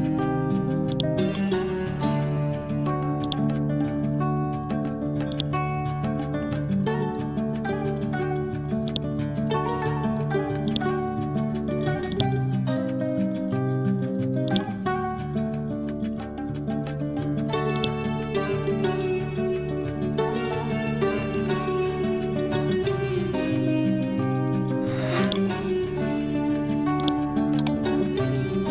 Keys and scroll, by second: 17.1 Delete, 21.0 Delete.